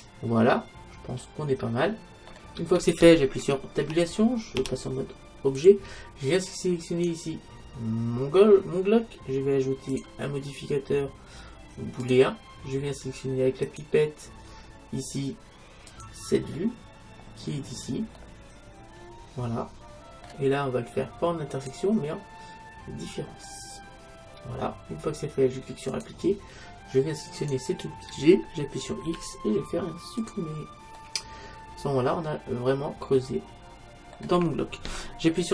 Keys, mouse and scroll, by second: 3.8 Tab, 4.6 Tab, 6.9-8.8 right drag, 9.9-11.8 drag, 13.7-15.7 drag, 18.2-20.2 middle drag, 21.6-23.4 drag, 26.0-27.7 drag, 27.4-29.2 right drag, 29.2 x, 31.0 middle click, 32.8 middle click.